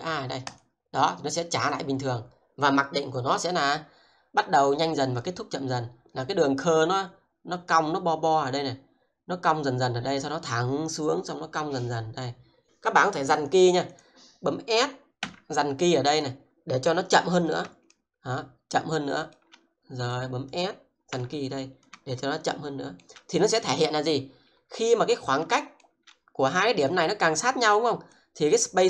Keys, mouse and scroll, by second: 13.4 click, 15.2 s, 15.9 click, 17.9 shift+middle click, 20.1 click, 21.0 s, 21.6 click, 22.2 shift+middle click, 23.4 click, 24.6-25.0 scroll up 1, 25.6 shift+middle click, 26.5 click, 28.1 double click.